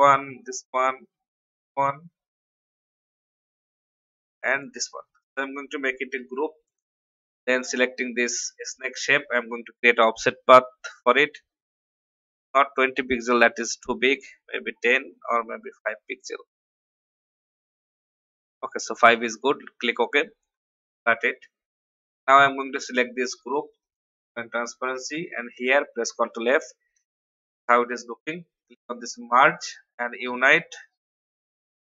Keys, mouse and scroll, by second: 0.4 shift+click, 4.7 shift+click, 6.1 ctrl+g, 7.1 click, 9.8 ctrl+alt+f, 11.0 click, 13.6 shift+scroll down 1, 14.8 scroll down 1, 19.1 click, 20.8 ctrl+x, 22.0 click, 25.5 ctrl+f, 29.1 click, 31.5 F10.